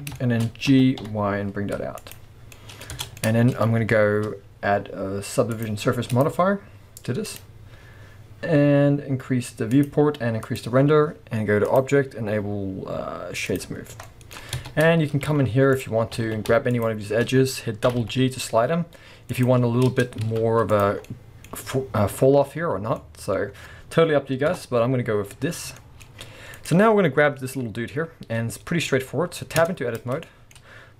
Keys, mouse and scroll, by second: 0.2-2.1 shift+middle drag, 0.7 g, 2.1 click, 2.5-5.5 middle drag, 2.9 Tab, 3.6 scroll down 1, 5.5 click, 6.1-14.1 drag, 13.8 scroll up 1, 14.1-16.7 middle drag, 14.6 Tab, 14.7 scroll up 1, 15.3 z, 16.2 alt+a, 16.7 alt+shift+click, 17.9 g, 19.4 click, 19.9 Tab, 20.1 scroll down 1, 20.2 z, 21.0-26.5 middle drag, 24.5 KP_0, 25.3-26.5 scroll up 4, 26.5 click, 26.8-27.4 scroll up 2, 29.6 Tab, 30.2-30.9 shift+middle drag.